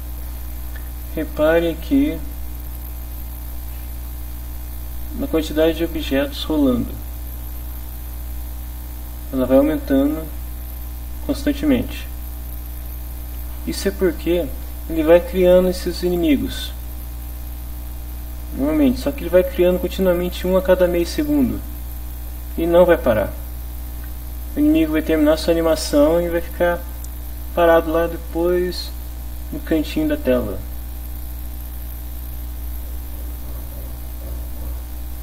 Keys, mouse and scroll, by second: 2.7-4.8 drag, 7.4 click, 32.8 click, 34.1 click.